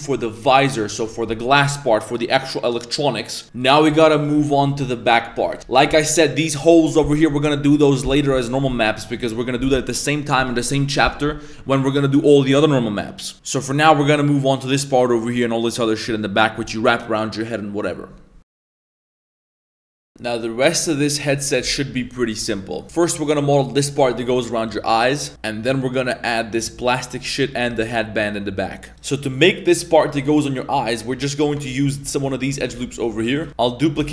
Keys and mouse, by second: 31.3 right click, 31.5 Tab, 31.7 shift+middle click, 32.0 middle drag, 32.5 1, 33.0 alt+right click, 33.2 middle click, 33.4 shift+middle click, 33.5 ctrl+s, 33.5 z, 34.0 shift+d.